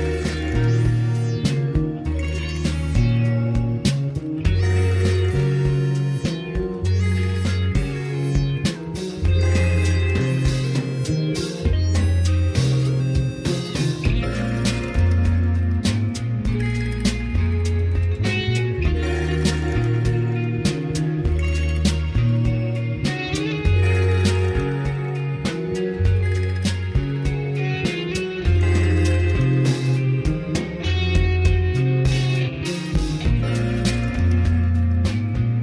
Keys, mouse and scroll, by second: 4.9 n, 8.8-12.9 drag, 13.2 ctrl+space, 19.1-20.6 drag, 22.4 ctrl+space, 25.0-29.5 drag, 29.5 middle click, 30.5 scroll up 2, 31.5 middle click, 34.1 click, 34.6 ctrl+space.